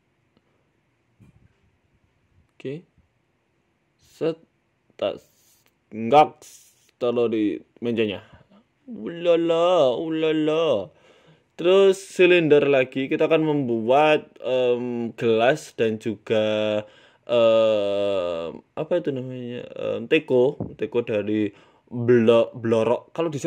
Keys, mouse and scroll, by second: 0.4 z, 1.5 ctrl+s, 2.6 z, 3.7 right click, 4.1 g, 5.4 z, 5.8 scroll down 3, 6.0 middle click, 6.0-6.8 scroll down 5, 6.6 middle click, 7.2 g, 8.3 middle click, 9.2 KP_1, 9.6 scroll down 4, 9.9 shift+middle click, 10.2 shift+a, 12.5 scroll down 2, 13.1-13.8 scroll down 3, 13.1 g, 13.8 scroll up 6, 14.0 shift+middle click, 14.3 s, 15.5 shift+middle click, 15.7 Tab, 16.1 click, 16.5 s, 17.2 shift+middle click, 17.7 click, 18.6 e, 18.9 s, 20.9 e, 22.5 middle click, 23.4 e.